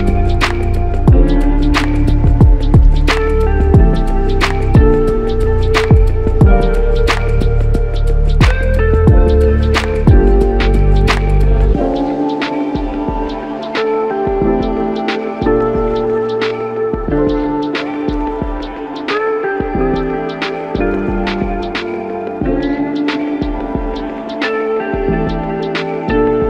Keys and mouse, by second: 1.0 alt+click, 6.5 alt+click, 10.5 alt+click, 15.6 alt+click, 16.5 shift+click, 18.1 shift+click, 21.0 alt+shift+click, 24.2 alt+click.